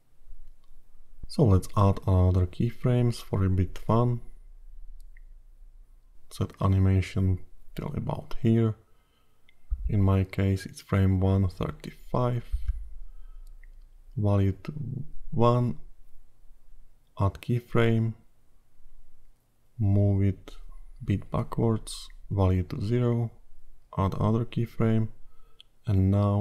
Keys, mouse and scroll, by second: 1.5 click, 16.6 click, 18.9 click, 23.2 click, 25.1 click.